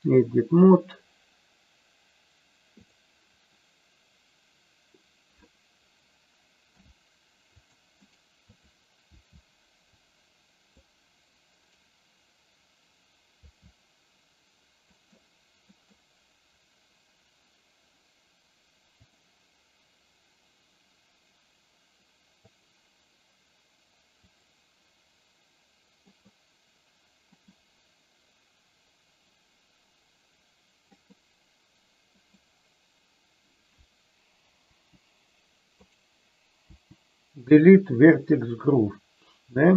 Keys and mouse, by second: 6.6 c, 8.4 click, 9.1 c, 13.4 c, 15.6 middle click, 19.0 click, 22.5 click, 24.2 click, 26.0 middle click, 27.2 middle click, 30.9 middle click, 32.1 middle click, 34.6 Delete, 36.5 Delete.